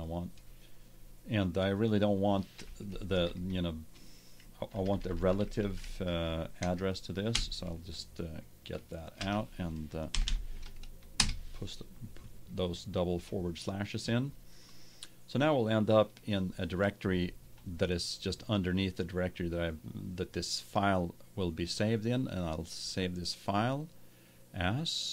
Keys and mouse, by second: 0.0-1.7 drag, 2.2-3.7 drag, 4.6 Right, 10.2 shift+7, 22.8-24.7 drag.